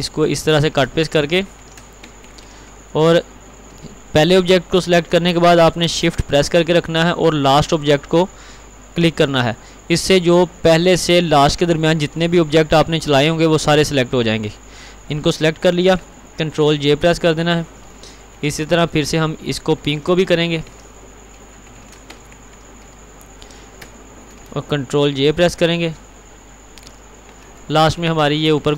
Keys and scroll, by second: 1.4 ctrl+x, 1.7 ctrl+r, 17.0 ctrl+j, 19.8 ctrl+x, 20.2 ctrl+r, 21.6 ctrl+x, 22.1 ctrl+®, 26.9 ctrl+j.